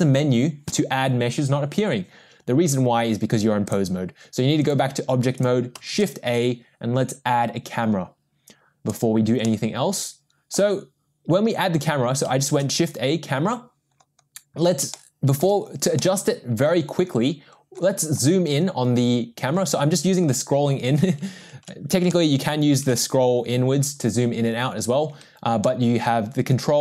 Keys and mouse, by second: 3.6-4.8 drag, 5.9 shift+a, 9.4-10.5 middle drag, 12.7 shift+a, 14.9-15.4 shift+middle drag, 16.0 middle click, 22.2-22.9 ctrl+middle drag, 25.7-26.8 ctrl+middle drag.